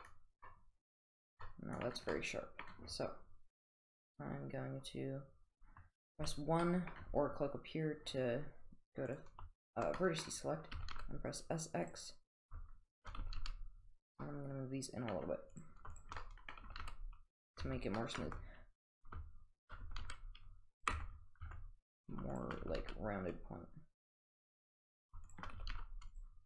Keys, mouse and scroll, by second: 0.0-0.4 middle drag, 1.5-1.9 middle drag, 2.1-2.7 middle drag, 6.3 1, 6.6 middle click, 9.6 shift+click, 10.0 middle click, 10.8 s, 12.3 click, 12.9 shift+click, 13.2 s, 14.3 middle click, 15.2-15.5 scroll down 1, 15.5 click, 16.4 middle click, 16.7 s, 17.7 Tab, 18.0 middle click, 18.0 middle click, 18.2 middle click, 19.0 Tab, 19.0 click, 19.6 shift+click, 19.8 s, 21.0 Tab, 21.5 Tab, 22.3 shift+click, 22.7 s, 25.3 shift+click, 25.6 s.